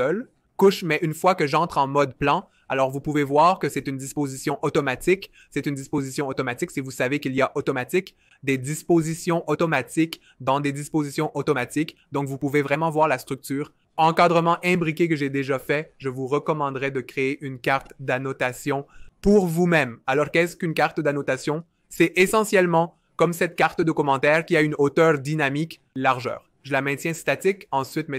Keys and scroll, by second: 0.7 super+y, 9.3 super+y, 23.4-24.7 typing.